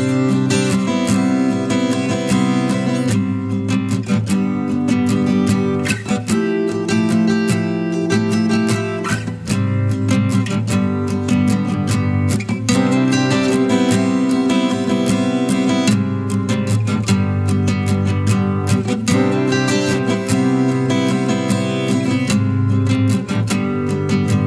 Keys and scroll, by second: 1.1 ctrl+z.